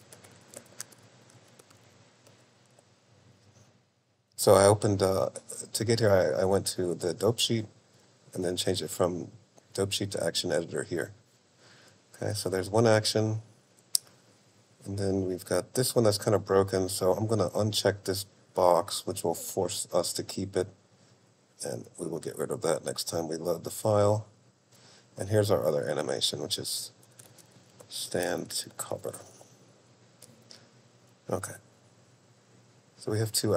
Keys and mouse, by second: 4.8 click, 7.6 click, 8.2 click, 9.7-10.9 drag, 12.6 click, 17.3 click, 20.7 click, 22.3-24.4 drag, 26.9-28.7 drag, 29.2 click, 32.8-33.5 drag.